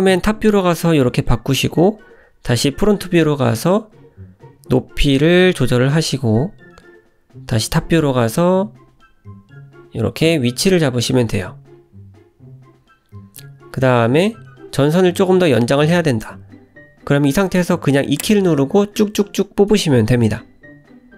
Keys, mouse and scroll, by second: 0.4 click, 0.8 g, 1.7 click, 2.0 g, 2.9 click, 3.2 g, 4.8 click, 5.0 g, 5.5 click, 5.8 g, 6.4 click, 6.7 g, 7.5 `, 8.4-8.7 scroll up 2, 8.8 shift+middle click, 9.5 click, 9.8 g, 11.3 click, 11.5 g, 12.4 click, 12.6 g, 13.2 click, 13.5 g, 14.4 click, 14.7 g, 15.9 e, 16.7 e, 18.0 e, 18.9 shift+middle click, 19.5 e, 20.6 e.